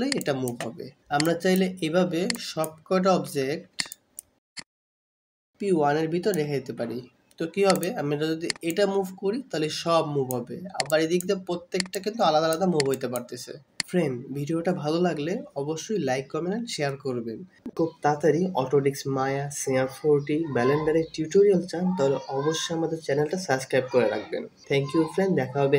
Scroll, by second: 4.5 scroll up 2, 4.7 scroll, 6.9 scroll up 2, 7.0 scroll.